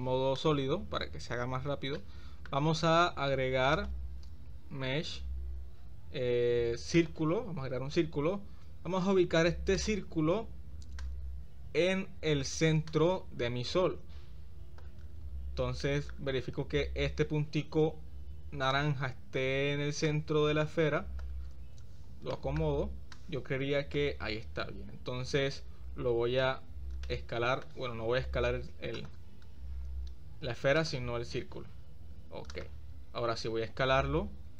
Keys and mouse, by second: 0.4 right click, 2.1-2.5 shift+middle drag, 3.7-7.2 drag, 11.0-12.4 drag, 12.9-14.9 drag, 15.9 shift+middle drag, 18.7-19.4 drag, 20.1-21.3 drag, 22.3-22.6 shift+middle drag, 23.2-24.0 drag, 25.6 s, 27.0-27.6 middle drag, 28.3 z, 33.7 s.